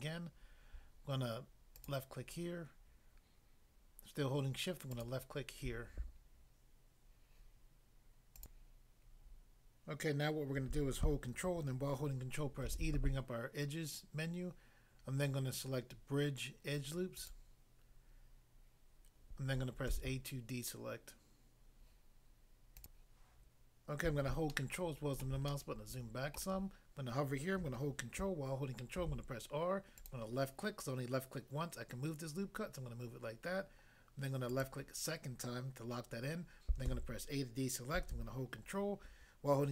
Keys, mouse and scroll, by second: 1.8 shift+click, 4.9 shift+click, 5.0 shift+click, 8.4 click, 12.6 ctrl+e, 17.1 click, 19.9 a, 22.8 click, 23.0 click, 24.5 ctrl+middle click, 29.0 ctrl+r, 30.0 click, 30.1 click, 34.5 click, 34.6 click, 36.9 a.